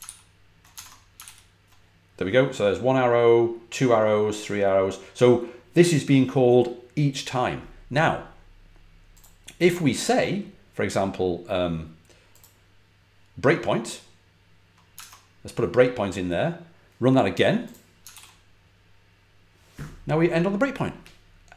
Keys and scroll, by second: 0.6 super+Tab, 1.1 super+r, 14.9 super+Tab, 18.0 super+r.